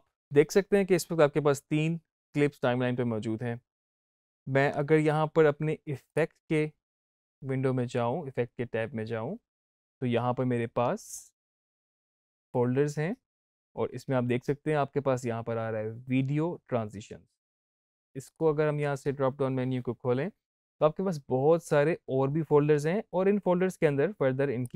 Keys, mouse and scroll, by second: 5.9 click, 11.0 click, 13.2 click, 18.1 click, 22.6-24.4 scroll down 1, 24.5 click.